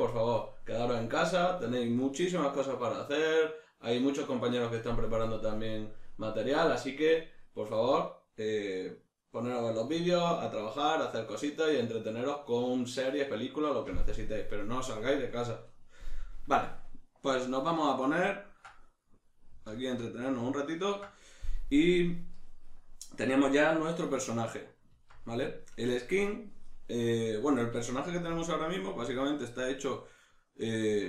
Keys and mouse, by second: 19.7 alt+q, 24.0 Tab, 27.6 middle click.